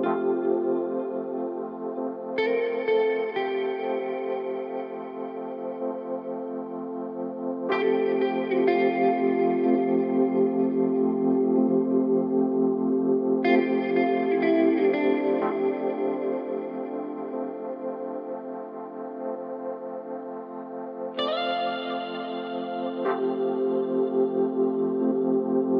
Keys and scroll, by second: 1.1 ctrl+z, 7.5 1, 11.2 3, 23.8 ctrl+z.